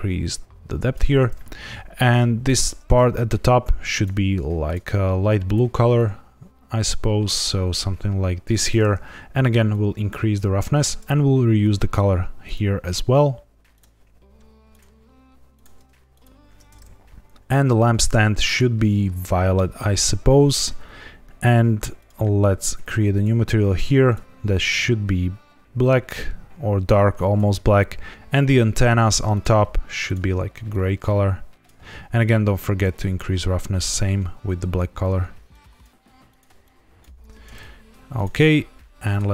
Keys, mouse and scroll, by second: 2.4 click, 3.9 click, 4.6 click, 5.4 click, 9.7 click, 11.5 click, 12.4 click, 15.5 click, 17.3 click, 17.6 click, 18.4 click, 21.9 click, 23.1 click, 24.0 click, 28.1 click, 28.4 click, 29.3 click, 30.0 click, 32.9 click, 33.7 click, 36.6 click, 38.1 click, 39.0 click.